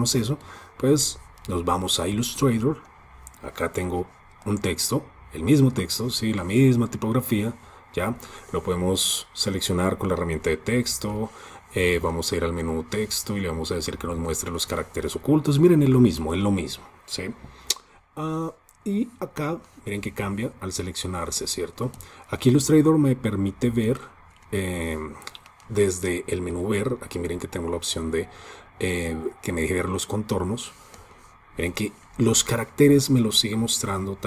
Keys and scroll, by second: 10.2 alt+super+i, 26.8 super+y.